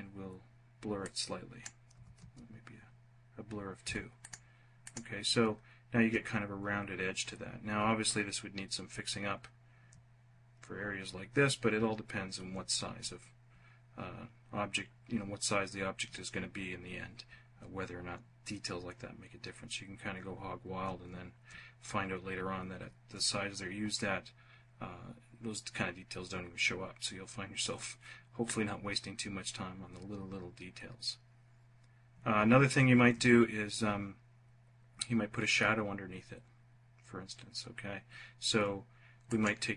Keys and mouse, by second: 1.4 2, 3.2 F1, 38.6 click.